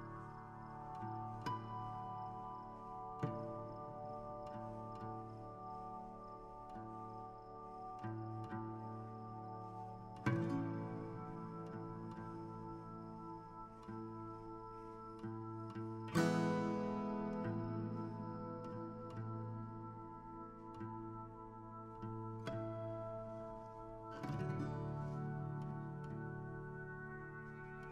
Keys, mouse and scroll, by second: 2.9-4.5 shift+drag, 4.5 g, 6.6-10.3 drag, 12.2-14.6 shift+drag, 14.6 g, 15.3 r, 16.5 click, 16.9 a, 22.4 a, 22.6 click, 23.8 alt+h, 25.6 a.